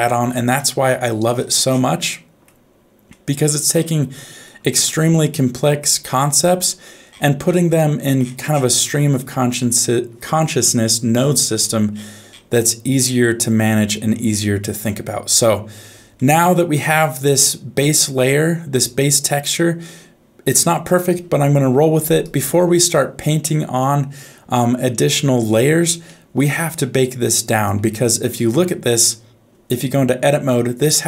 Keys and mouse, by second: 0.5 middle click, 2.1 middle click, 3.1 middle click, 4.2 middle click, 4.9 ctrl+Tab, 6.2 middle click, 7.8 middle click, 9.1-11.6 middle drag, 13.7 middle click, 16.1 shift+middle click, 16.9-19.1 middle drag, 26.1 shift+middle click, 27.3 click, 30.4 Tab.